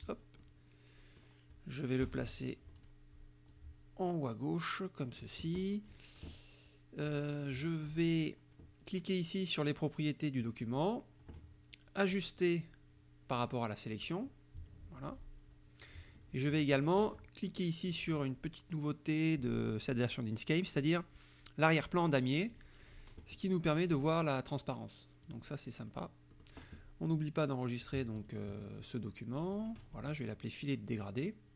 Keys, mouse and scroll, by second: 0.5-1.5 drag, 2.1 KP_Subtract, 3.5-5.4 drag, 7.1 click, 10.5 click, 12.2 click, 14.6 click, 15.9-16.9 drag, 22.6 click, 25.3 click, 26.0 click, 26.0 right click, 26.4 click, 28.3 click, 29.6 click.